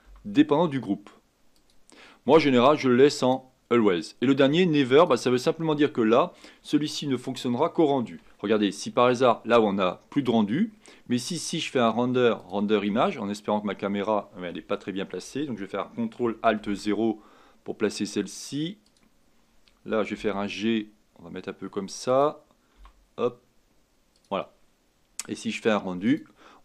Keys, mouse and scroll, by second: 0.0 g, 3.2-6.2 drag, 11.7-13.0 drag, 14.6 drag, 16.6 ctrl+alt+KP_0, 18.8-20.1 drag, 20.1 g, 22.8 g, 25.5-26.6 drag.